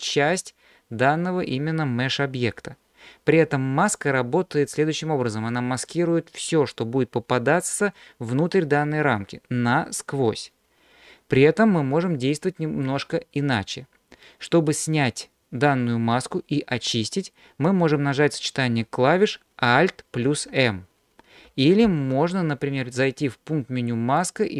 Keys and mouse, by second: 11.4-12.9 middle drag, 20.2 alt+m, 21.9 ctrl+z, 24.2-24.5 drag.